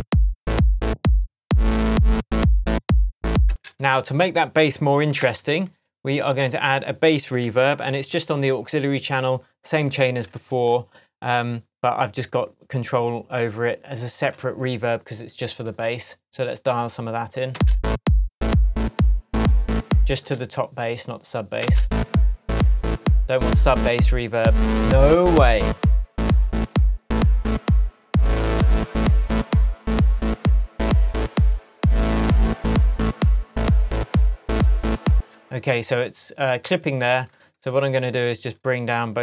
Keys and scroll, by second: 3.4 space, 5.1 Tab, 7.4 super+s, 17.5 space, 20.1 space, 21.5 space, 35.1 space, 37.5 BackSpace.